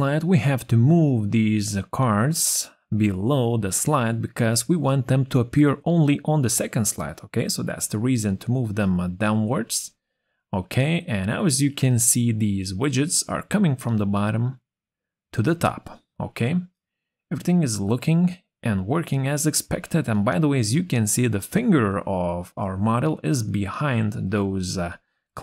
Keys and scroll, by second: 23.4 ctrl+z, 24.8 ctrl+z.